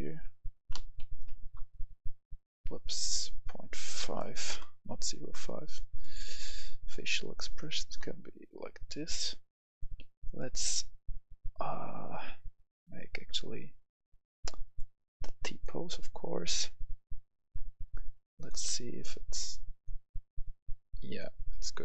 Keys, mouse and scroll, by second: 1.0 typing, 1.3 Return, 2.7 click, 4.0-4.3 typing, 4.4 Return, 5.9 click, 7.9-10.2 scroll down 1, 10.2 click, 17.5-18.3 scroll down 1, 18.3 click, 18.6-19.7 scroll down 1, 19.7-21.8 drag.